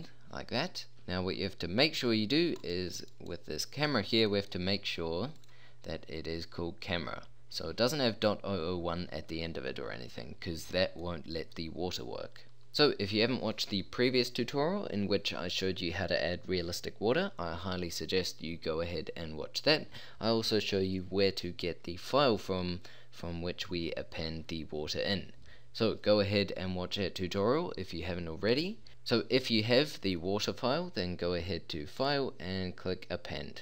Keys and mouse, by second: 1.0 z, 4.4-7.8 middle drag, 11.0-12.7 middle drag, 31.9-33.5 drag.